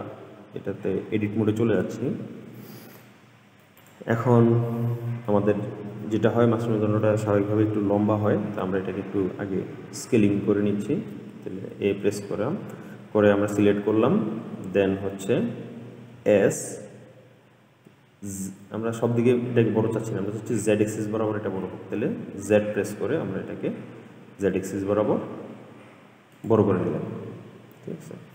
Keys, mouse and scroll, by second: 1.3 Tab, 3.2 middle click, 4.0 click, 4.4-7.5 middle drag, 11.9 a, 16.4 s, 27.2-28.3 scroll down 4.